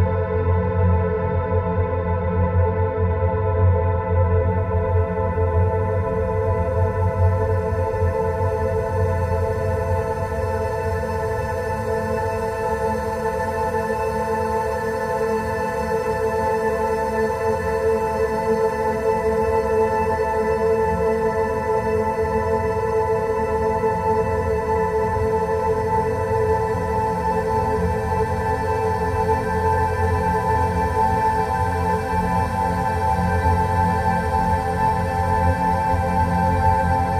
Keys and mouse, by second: 0.9 ctrl+r, 7.3 ctrl+r, 12.8 3, 18.1 shift+click, 19.8 shift+click, 20.7 shift+click, 21.7 shift+click, 23.0 shift+click, 24.3 shift+click, 25.1 shift+click, 28.4 e, 32.1 Tab.